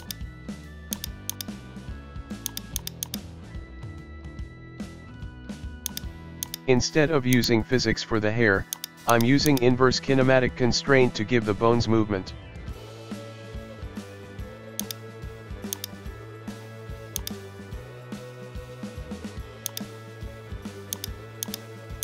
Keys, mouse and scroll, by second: 0.2 shift+right click, 0.4 middle click, 1.2 shift+right click, 1.5 shift+right click, 1.6-2.7 shift+middle drag, 2.7 shift+right click, 3.5 scroll down 1, 3.7-5.4 shift+middle drag, 5.9 click, 6.4-7.9 drag, 8.7-10.6 drag, 10.6 scroll up 1, 10.8-11.2 shift+middle drag, 11.2 scroll up 1, 11.4-13.0 middle drag, 13.0 g, 15.7-17.4 drag, 17.7 scroll down 1, 17.8-18.7 middle drag, 18.9 g, 19.8-20.3 middle drag, 20.3 g, 21.1 middle click, 21.5 right click, 21.6 middle click.